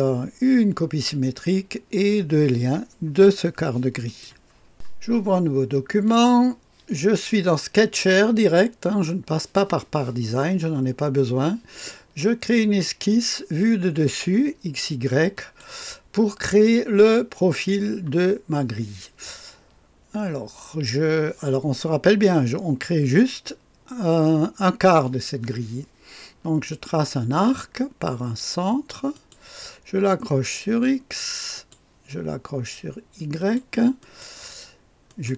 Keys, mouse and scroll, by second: 4.1 click, 6.1 click, 12.8 click, 15.4 click, 15.8 click, 16.5-17.7 right drag, 26.7 click, 29.1 click, 31.5 click, 33.4 click, 34.0 click, 35.1 right click.